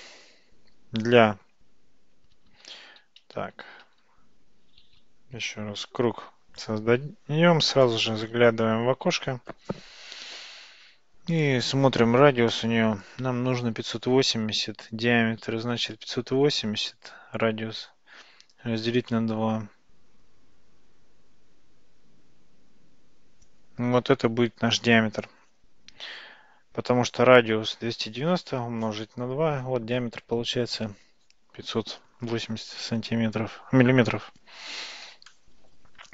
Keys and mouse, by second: 2.1 Tab, 2.9 ctrl+z, 3.3 ctrl+z, 3.6 ctrl+z, 3.9 ctrl+z, 4.9 shift+a, 7.9-9.8 drag, 12.1-26.8 drag.